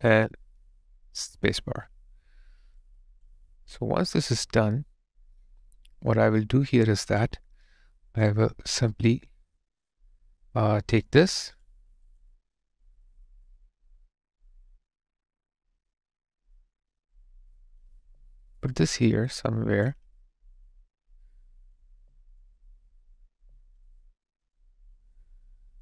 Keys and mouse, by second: 1.4 space, 12.1 double click, 18.2 alt+middle click, 18.7 alt+click, 21.8 alt+click.